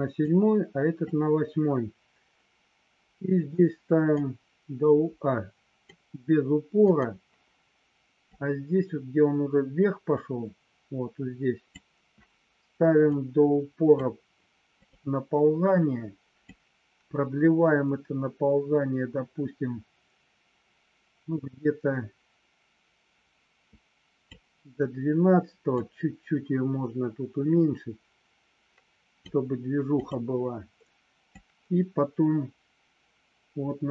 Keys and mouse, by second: 0.3 click, 4.3-5.7 drag, 8.3-11.7 drag, 13.3 click, 14.7 click, 16.4-24.3 drag, 25.6-29.2 drag, 30.0 click, 31.4-33.9 drag.